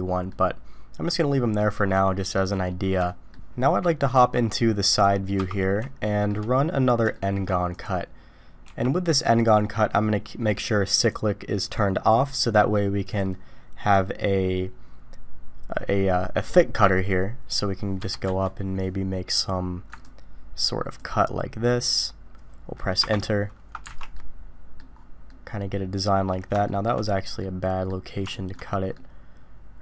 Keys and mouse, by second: 0.3-1.6 middle drag, 3.1-4.1 shift+middle drag, 4.1 KP_3, 6.0 shift+middle click, 7.1 shift+middle drag, 8.6 d, 10.9 click, 13.1 click, 14.1-16.4 drag, 20.2-21.0 ctrl+drag, 23.9 alt+a, 24.1-24.7 drag, 25.3-26.0 drag, 26.7 shift+drag, 27.4-27.9 drag, 28.3 shift+drag, 28.6-28.9 middle drag, 28.9-29.8 drag.